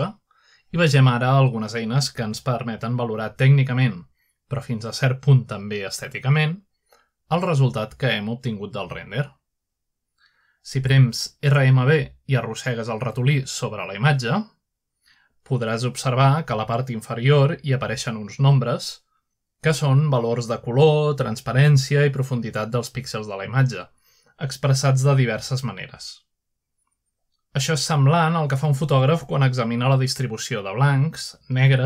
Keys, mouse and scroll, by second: 1.2 F11, 2.5-3.8 drag, 5.4-6.1 scroll down 1, 6.1-7.0 scroll up 1, 7.5-9.9 middle drag, 12.5-20.7 right drag, 21.3-31.8 right drag.